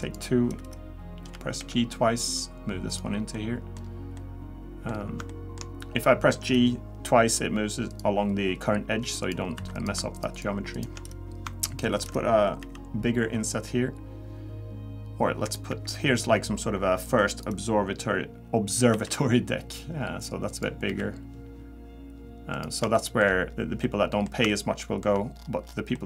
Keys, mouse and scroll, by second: 0.0 click, 1.3 g, 3.3 middle click, 3.9 scroll down 2, 4.2 middle click, 4.9 scroll up 2, 5.3 shift+middle click, 6.7 scroll down 1, 7.9 click, 9.2 click, 9.6 3, 9.7 click, 10.1 shift+click, 10.3 shift+click, 10.9 click, 12.6 i, 15.7 e, 18.9 i, 20.9 e, 22.9 shift+middle click, 23.5-23.8 scroll down 1, 23.8 middle click, 24.5 shift+middle click, 25.3-25.9 scroll down 8, 25.9 middle click.